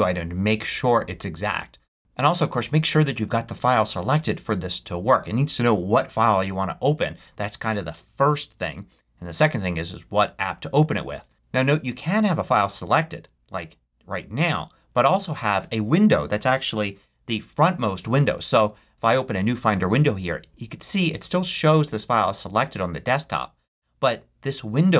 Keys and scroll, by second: 18.4 super+n.